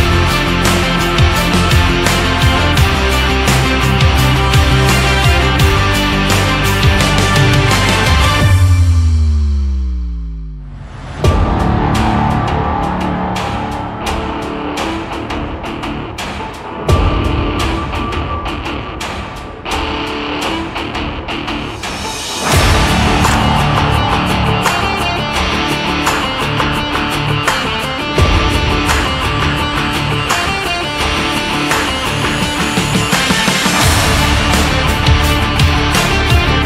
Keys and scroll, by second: 9.0 ctrl+s, 28.4 space.